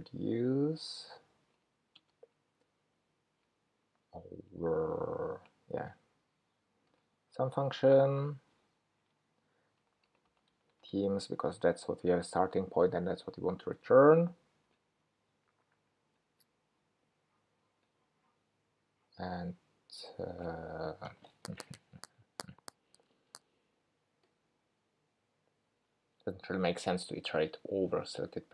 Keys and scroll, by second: 13.4 Escape.